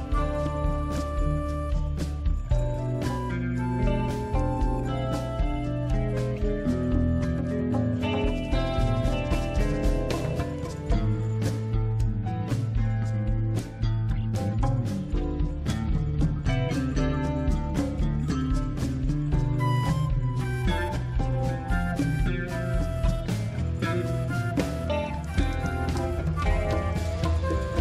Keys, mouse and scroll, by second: 1.6 click, 2.9 click, 6.2 click, 8.0 click, 9.3 click, 9.4 click, 12.2 click, 14.3 click, 20.4 click, 22.9 click, 25.6 click, 26.8-27.5 scroll down 2, 27.5-27.8 scroll up 2.